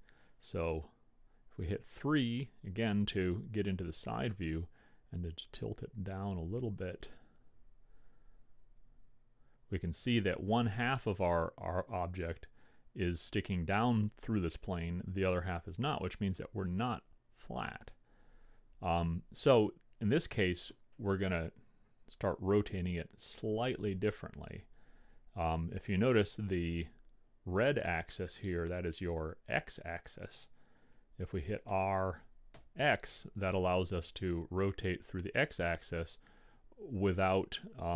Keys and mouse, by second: 0.9 KP_3, 4.6-6.2 drag, 26.4-29.1 middle drag, 32.0 r.